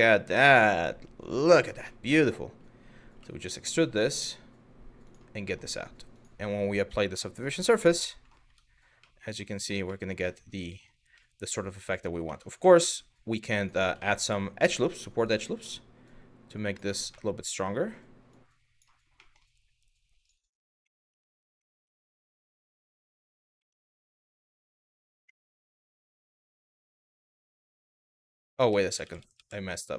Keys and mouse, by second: 1.6 middle click, 2.8 e, 4.7 click, 5.1 middle click, 5.7-7.0 drag, 7.3 click, 7.7 middle click, 8.1 Tab, 8.6-9.1 middle drag, 9.6 middle drag, 10.3 shift+middle drag, 10.9-11.7 middle drag, 11.9 Tab, 12.4 middle click, 13.2 click, 13.7 middle click, 14.9 click, 15.7 click, 16.8 middle click, 17.9 click, 18.9 middle click, 19.9 click, 20.5 middle click, 20.9 shift+middle click, 21.3 middle click, 21.6 shift+middle click, 22.3 shift+middle click, 23.2 1, 23.8 middle click, 24.9 KP_1, 26.7 shift+middle click, 28.3 ctrl+z, 28.5 ctrl+z.